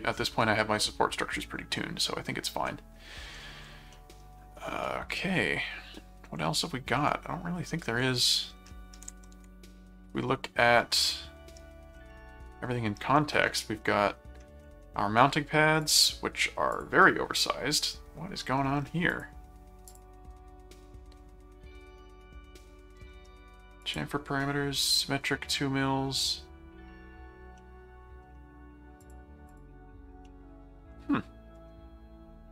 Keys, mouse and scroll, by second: 2.6 middle click, 3.9 middle click, 4.8-6.2 middle drag, 6.6-7.0 scroll down 2, 7.1 middle click, 8.0-8.6 scroll down 2, 8.7 middle click, 9.1 ctrl+Tab, 11.0 middle click, 12.1 middle click, 13.2 middle click, 15.8 click, 16.7 click, 19.1 click, 19.8 click, 23.2 scroll down 2, 23.8 click, 24.5 scroll down 2, 25.6 middle click, 27.6 middle click, 28.2 scroll down 2, 29.0 click, 30.3-31.6 middle drag, 30.4-31.0 scroll up 2, 31.5 scroll down 2.